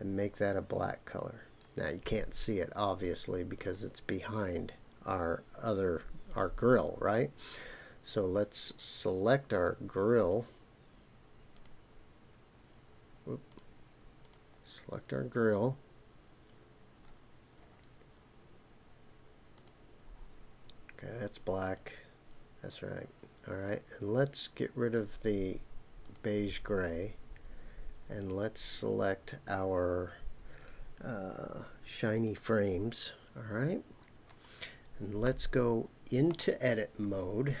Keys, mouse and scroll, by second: 5.7 click, 11.6-13.6 drag, 14.2 click, 19.5 click, 21.6 click, 26.0 click, 28.2-32.3 drag, 34.1-34.6 scroll down 1, 35.2-36.3 middle drag.